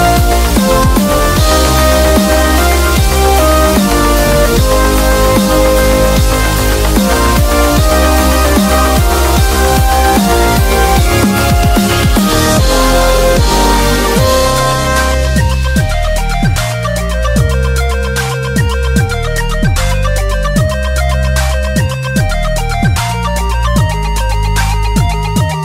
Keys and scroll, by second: 1.6-2.5 typing, 5.6 super+t, 6.8 Return, 7.1 v, 7.8 shift+Up, 8.5 shift+Left, 9.0 Up, 9.2 Up, 9.3 Up, 9.4 Up, 9.7 Left, 9.9 Left, 10.0 Left, 10.2 Up, 10.4 Up, 10.5 Up, 10.7 Up, 10.9 Left, 12.3 ctrl+Tab, 13.5 super+a, 13.9 super+c, 14.1 super+c, 14.8 super+w, 16.2 super+v, 18.9-20.3 typing, 21.7 Return, 22.0 super+=, 22.2 super+=, 22.2 super+=, 22.6 super+=.